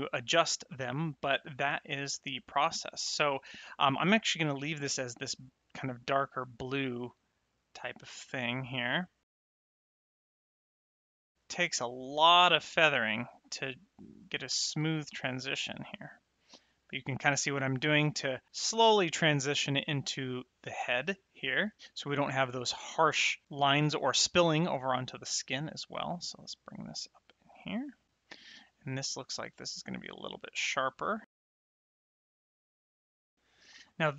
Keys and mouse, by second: 1.4 middle click, 2.4 middle click, 5.2 click, 9.9 click, 10.4 click, 10.8 click, 11.0 click, 11.4 click, 12.9 click, 25.8 click, 28.0 click, 28.8 click, 31.3 click, 32.6 click, 33.0 click, 33.2 click, 33.4 middle click.